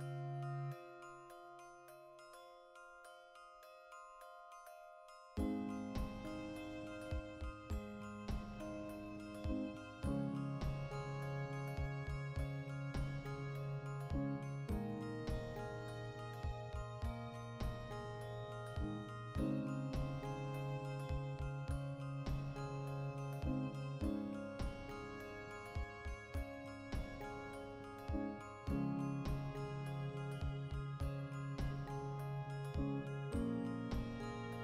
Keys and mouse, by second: 0.0-0.4 typing, 0.0 right click, 0.5-2.1 ctrl+middle drag, 2.0-6.7 typing, 2.1 right click, 4.0 click, 4.5 right click, 5.7 right click, 6.2-10.5 middle drag, 8.6 alt+h, 10.3 2, 10.5 alt+right click, 10.9 alt+q, 11.2-12.7 ctrl+shift+middle drag, 11.8 e, 12.7 click, 12.9-15.0 ctrl+middle drag, 13.0-16.7 typing, 15.0 click, 15.4 click, 16.2 click, 16.6 click, 17.2 ctrl+r, 18.2 right click, 18.4 z, 18.7-20.2 ctrl+shift+middle drag, 19.4 ctrl+r, 20.2 right click, 20.3-28.4 middle drag, 22.4 ctrl+r, 23.8 click, 27.3 ctrl+r, 28.2 click, 28.4 ctrl+r, 29.1 click, 29.3 ctrl+r, 30.2 click, 30.3 right click, 30.5 l, 31.4 click, 31.9 alt+q, 32.1 z, 32.3 ctrl+middle click, 32.9 3, 33.2 alt+right click, 33.6 ctrl+KP_Add, 34.3 c.